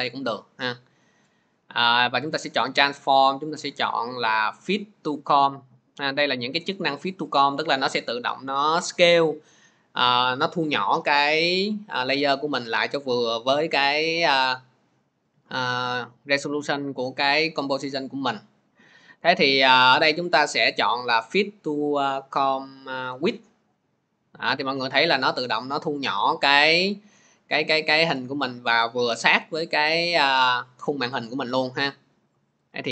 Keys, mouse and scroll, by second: 23.2 click, 27.1 scroll, 32.0-32.5 scroll, 32.7 scroll.